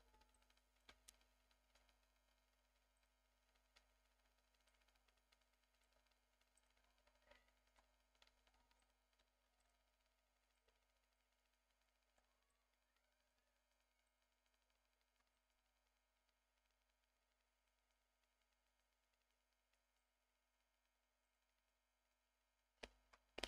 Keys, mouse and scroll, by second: 0.3 alt+middle click, 0.9 Tab, 1.7 Tab, 2.9 click, 4.2-4.7 scroll down 2, 4.7-5.8 alt+middle drag, 6.0 Tab, 6.1-6.5 scroll up 1, 6.5 click, 7.9 i, 8.8 click, 9.4 ctrl+r, 10.5 click, 10.7 Tab, 10.9 scroll down 1, 11.1-11.8 alt+middle drag, 12.1 alt+scroll up 3, 12.5-13.3 alt+middle drag, 13.5-14.0 scroll up 2, 13.5 Tab, 14.0-15.2 drag, 15.2 3, 15.3 click, 17.4 i, 20.0 click, 20.3 s, 21.3 click, 21.4 Tab, 21.7 scroll down 1, 23.0 scroll down 1, 23.1 KP_Divide.